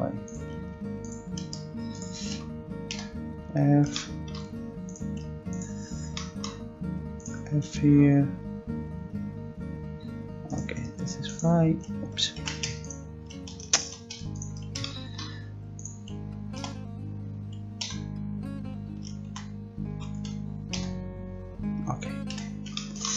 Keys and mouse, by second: 0.3-3.9 right drag, 2.9 f, 4.8-9.0 right drag, 9.0 f, 12.4 ctrl+z, 13.8 ctrl+z, 16.6 d, 17.8 f, 19.3 ctrl+z, 20.0 ctrl+z, 20.7 f, 22.3 a.